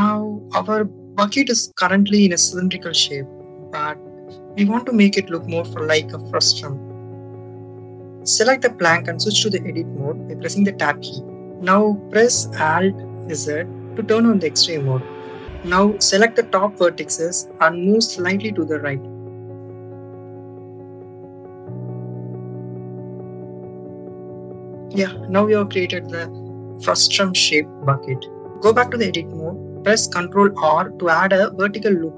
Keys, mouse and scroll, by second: 2.6-8.7 drag, 11.5 Tab, 13.1 click, 14.9 click, 15.5 click, 16.4 click, 17.8-21.6 drag, 23.0 click, 24.0 Tab, 24.9-26.1 drag, 27.5 click, 29.7 Tab, 31.9 ctrl+r.